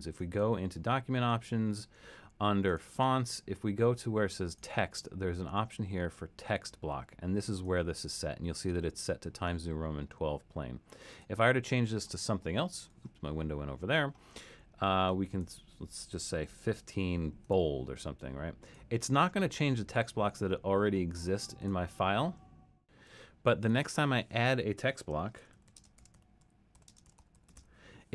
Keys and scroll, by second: 16.2-17.1 typing, 25.1-28.1 typing.